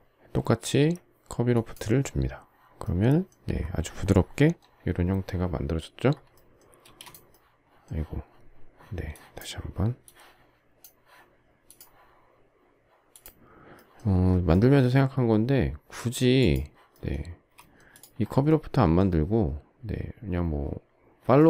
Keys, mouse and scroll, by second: 6.7 space, 17.2 space.